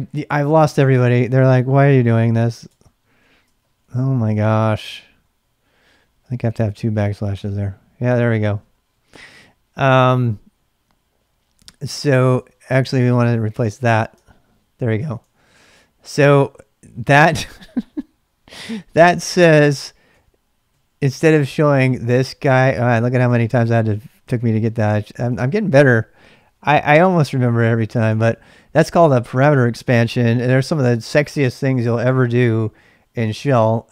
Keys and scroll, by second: 0.0-6.7 typing, 7.3 Return, 8.3-9.6 typing, 11.9-13.8 typing, 14.1 Return, 15.2 ctrl+[, 15.3 k, 20.1 k, 20.7 k, 21.6 k, 22.5 k, 24.3 Return, 24.3 k, 25.3 ctrl+[, 25.5 k, 25.8 k, 26.9 Return, 28.1 ctrl+[, 28.3 k.